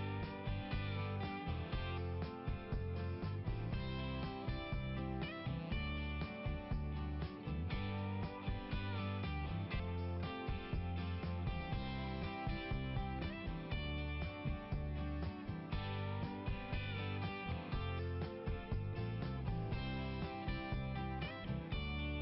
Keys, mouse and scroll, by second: 0.0 click, 3.8 click, 4.0 click, 6.9 click, 7.0 click, 8.0 click, 9.8 click, 10.1 click, 10.5 click, 15.5 click, 16.5 click, 20.4 scroll down 1.